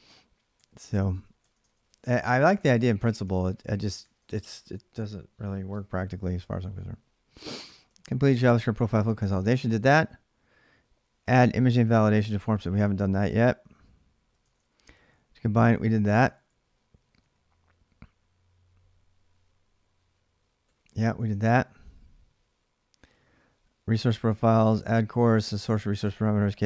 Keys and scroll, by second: 0.4 ctrl+[, 0.7-5.1 typing, 3.8 ctrl+[, 4.3 Return, 7.4-9.1 typing, 14.1-17.5 typing, 19.4-21.3 typing, 21.1 ctrl+[, 24.0-25.6 typing, 25.4 Return.